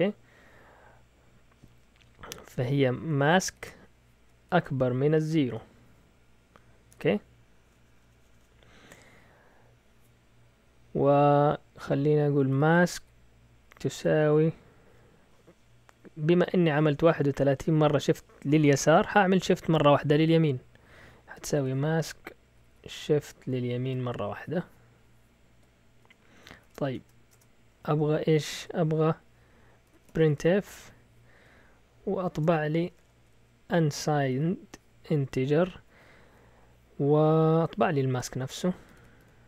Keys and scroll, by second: 2.9-4.4 typing, 5.5 typing, 6.9 typing, 12.2-14.0 typing, 21.1-22.7 typing, 23.9 typing, 25.7-27.1 typing, 27.3 Return, 28.0 Up, 28.3-30.8 typing, 32.3-34.7 typing, 38.4-39.4 typing.